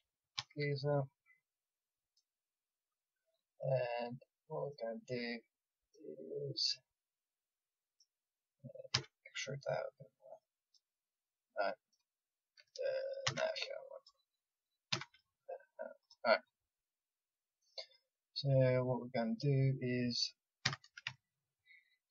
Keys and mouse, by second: 0.4 e, 3.0 middle click, 8.9 e, 9.1 middle click, 9.9 middle click, 11.0 click, 13.2 ctrl+z, 13.9-16.0 drag, 14.9 e, 20.6 a.